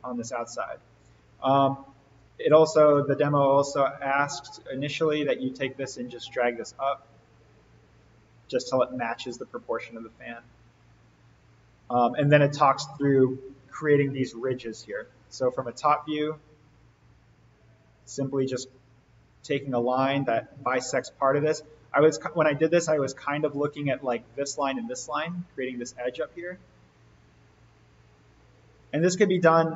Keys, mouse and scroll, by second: 0.0-1.2 scroll up 1, 1.2 click, 3.6 alt+n, 4.4-4.7 scroll up 1, 6.4-8.8 drag, 15.6 alt+n, 16.4-16.8 scroll up 1, 18.2 l, 21.1 Escape, 22.4-23.3 click, 26.7-28.7 drag, 29.0-29.4 scroll up 1.